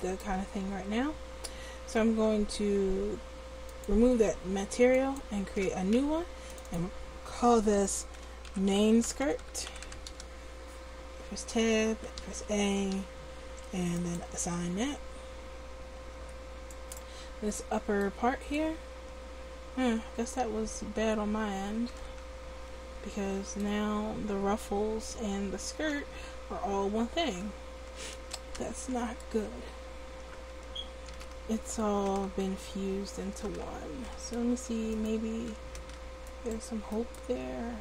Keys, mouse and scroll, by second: 0.7 Tab, 1.5 Tab, 2.3 Tab, 3.7-10.3 drag, 10.7 Tab, 11.4 Tab, 11.9 a, 12.2 a, 13.0 a, 14.0 click, 14.7 Tab, 16.1 Tab, 17.3 Tab, 20.4 a, 21.9 l, 29.5 Tab, 30.1 Tab, 30.6 a, 31.1 a, 34.2 p, 35.8 Tab, 37.4 Tab.